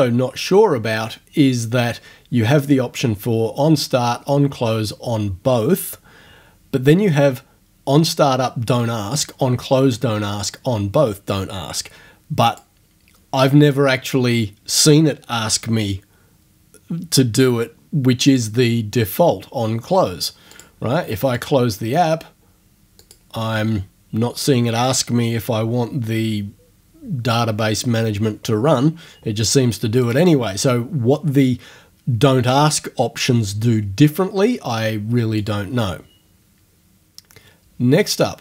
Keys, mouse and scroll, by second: 12.5 click, 18.3 click, 20.5 click, 21.4 click, 23.0 click, 30.1 click, 35.4 click.